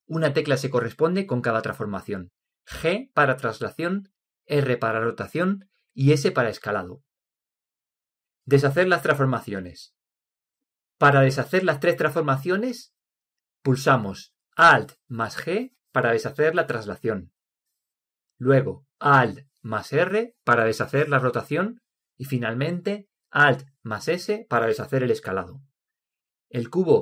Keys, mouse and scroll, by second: 17.0 alt+g, 21.6 alt+r, 24.6 alt+s.